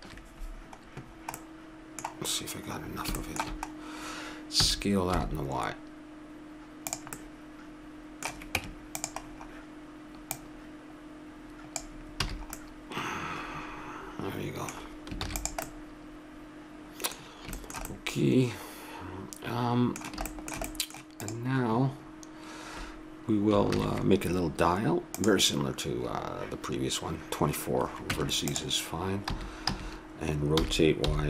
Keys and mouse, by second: 1.5 middle click, 1.7 middle click, 4.6 s, 7.2-8.6 middle drag, 8.6 Tab, 9.3 middle click, 10.3 middle click, 11.2 click, 11.6 click, 12.3 a, 12.5-13.8 middle drag, 15.2 ctrl+s, 21.2-23.0 right drag, 23.7 shift+a, 28.1 Tab, 28.5 click, 29.2 a, 29.6 a, 30.5 r.